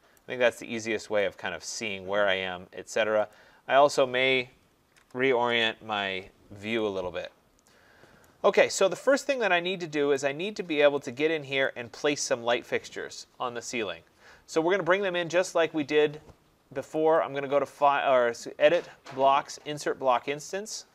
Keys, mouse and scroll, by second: 0.2 right click, 0.7 middle click, 0.8 middle click, 0.9 middle click, 1.7 right click, 2.0 middle click, 2.6 middle click, 2.7 middle click, 3.3 click, 4.9 z, 5.0 Return, 5.5 Return, 5.5 s, 6.4 middle click, 8.2 right click, 8.6 middle click, 8.7 middle click, 8.9 middle click, 10.2 right click, 10.6 middle click, 10.6 middle click, 10.7 middle click, 11.6 right click, 17.2 click.